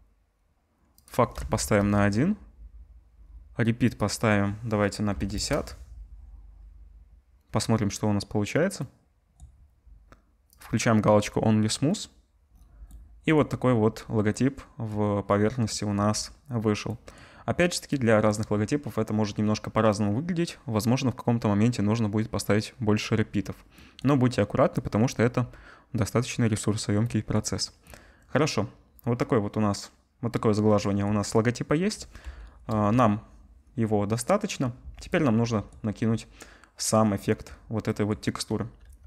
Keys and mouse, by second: 12.5 right click, 12.9-15.7 drag, 15.7 right click, 16.1 click, 16.9 right click, 17.1 click, 17.4 right click, 18.2-19.6 drag, 19.6-23.4 right drag, 23.4 click, 23.8 right click, 24.6-39.0 drag, 32.7 KP_0, 38.8 z.